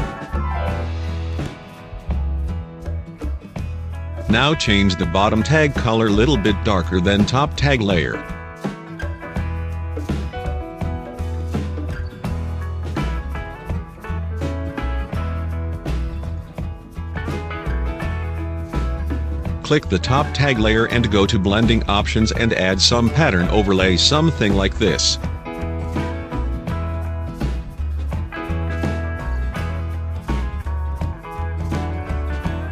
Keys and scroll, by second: 12.8 v, 15.2 alt+space.